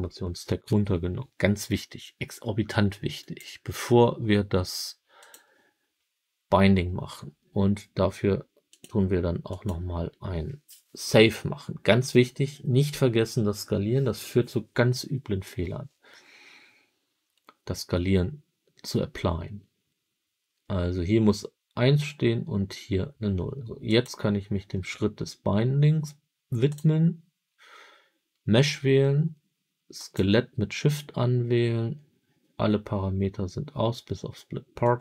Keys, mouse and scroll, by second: 3.1-5.4 drag, 23.8 click, 26.6 click, 29.9 shift+click, 34.7-35.0 drag.